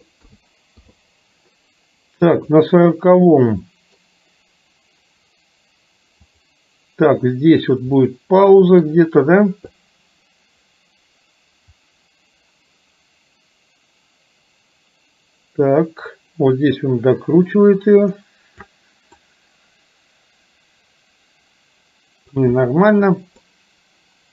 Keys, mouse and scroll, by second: 0.4 a, 0.9 i, 2.5 click, 3.4-4.0 middle drag, 6.4 click, 8.2-8.9 middle drag, 9.9-18.8 drag, 19.2-22.4 middle drag, 23.5-24.3 middle drag.